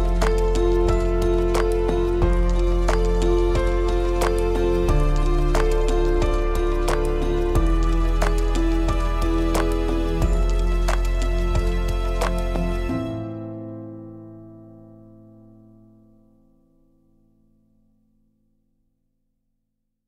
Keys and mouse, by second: 0.5-0.9 drag, 1.1 shift+click, 1.7 shift+click, 2.2 shift+drag, 2.8 shift+click, 3.7 shift+click, 4.9 shift+click, 6.6-8.8 drag, 9.4-9.7 middle drag, 10.9 click, 12.7 click, 13.7 click, 13.9 click, 14.9 click, 15.5 click, 16.1 click, 17.1 click, 17.6 click.